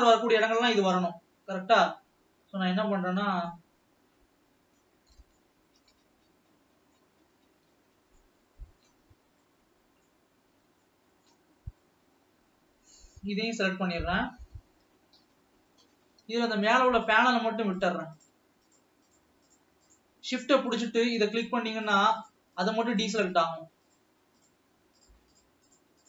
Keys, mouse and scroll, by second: 0.6 l, 1.2 l, 2.5 l, 3.2 l, 3.9 l, 4.5 l, 4.6-5.2 scroll down 2, 5.5-6.6 shift+middle drag, 6.6-7.2 scroll down 2, 7.2-9.6 middle drag, 9.6 scroll down 1, 9.8 middle click, 10.6-10.9 scroll up 1, 11.2 scroll up 1, 11.4-12.3 shift+middle drag, 12.3-13.4 scroll up 1, 13.4 l, 13.9-15.1 scroll down 1, 15.1 KP_7, 15.7-16.2 scroll up 2, 17.0-17.5 shift+drag, 18.1 shift+click, 18.5 shift+click, 19.4 shift+click, 20.3 shift+click, 21.8 shift+click, 22.3 shift+click, 22.5 shift+click, 23.3-23.7 shift+drag, 23.9 shift+click, 24.8-26.0 shift+drag.